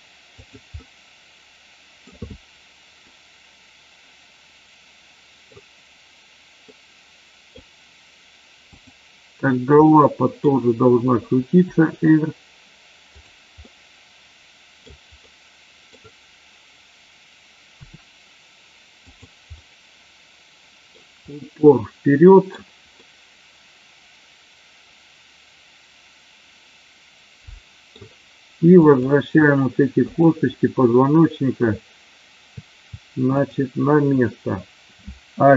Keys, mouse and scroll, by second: 0.3 click, 0.7-2.1 middle drag, 3.2-5.5 middle drag, 6.7-7.6 middle drag, 8.7 click, 9.8-10.3 middle drag, 11.6 r, 13.7-14.8 middle drag, 15.2 middle click, 17.8 r, 18.9 click, 19.6-20.9 middle drag, 21.2-22.6 middle drag, 23.1-27.8 middle drag, 28.8 click, 29.9 shift+click, 33.3 shift+click.